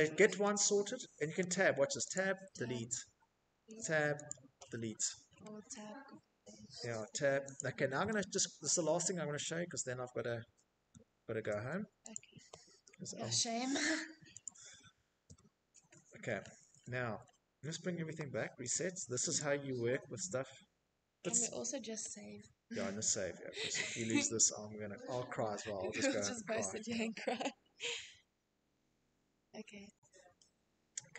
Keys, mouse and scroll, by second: 1.0 Tab, 2.0 Delete, 4.4 Tab, 5.5 Delete, 7.0 Tab, 8.2 Tab, 9.8 Delete, 11.2 Tab, 12.6 Delete, 17.2 click, 19.0 middle click, 20.1 shift+middle click, 21.4 click, 24.1-26.5 drag.